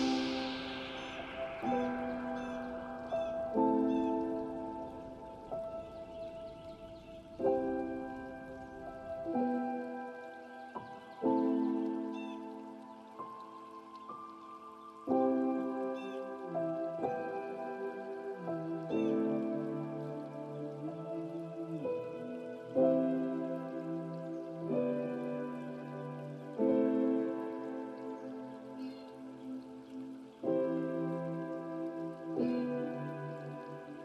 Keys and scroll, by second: 12.3 ctrl+space, 30.2 ctrl+space.